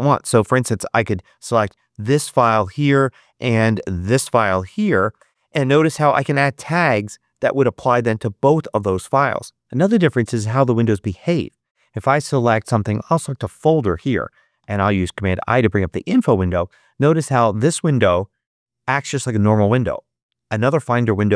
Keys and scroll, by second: 14.5 super+i.